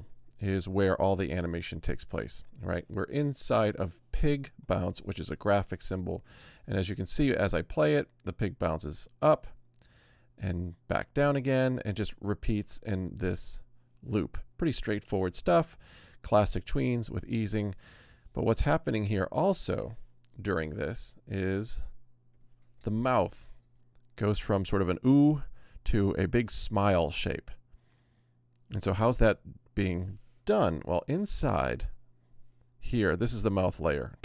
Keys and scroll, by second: 1.4 space, 7.0 Return, 17.3 Return, 20.4 z, 22.3 v, 22.8 Return, 29.1 Return, 30.7 v.